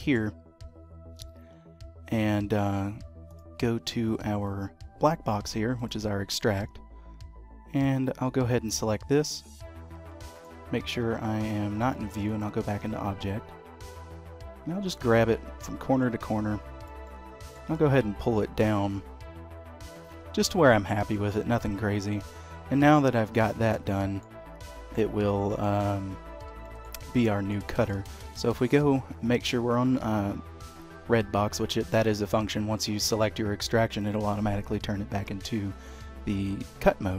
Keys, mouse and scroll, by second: 2.3 d, 7.7 click, 8.9 click, 10.9 d, 14.9 click, 17.0 middle click, 22.9 middle click, 23.9 shift+middle click, 24.9 middle click, 26.6 shift+middle click, 27.0 middle click, 27.7 shift+middle click, 28.2 d.